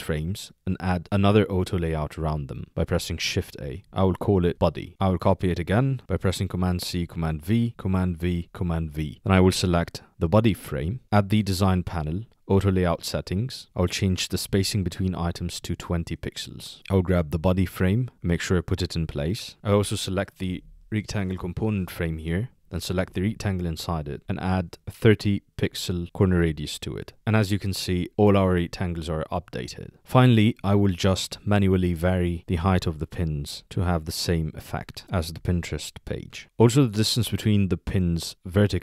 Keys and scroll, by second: 3.5 shift+a.